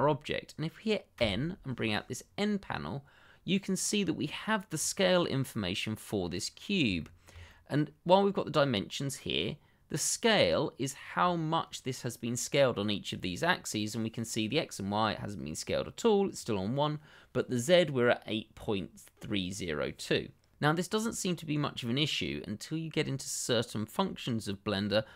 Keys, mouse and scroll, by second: 1.1 n, 6.9 shift+middle click, 7.0 middle click, 7.1 shift+middle click, 7.6 middle click, 20.6-21.6 scroll up 1, 21.6 middle click.